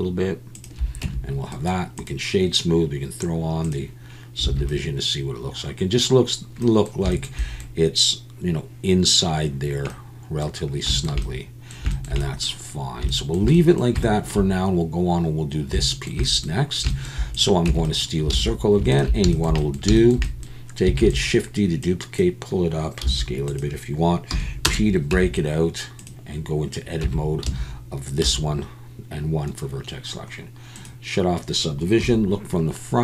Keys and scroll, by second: 1.0 Tab, 4.5 alt+a, 17.7 Tab, 18.3 alt+a, 21.0 shift+d, 23.0 s, 24.3 p, 25.1 Tab, 27.0 Tab, 27.5 a, 28.2 1, 32.0 KP_1.